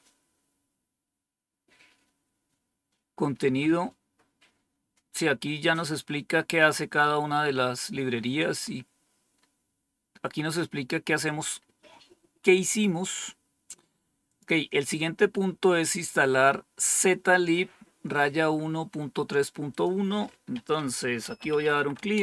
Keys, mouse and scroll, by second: 1.1-2.0 scroll down 4, 2.7-6.0 scroll down 11, 7.5-9.3 scroll up 4, 9.3-10.0 scroll up 1, 10.2-11.2 scroll up 2, 11.5-12.2 scroll up 2, 12.2-14.2 scroll up 1, 14.2 click, 19.6 click, 21.1-22.2 typing.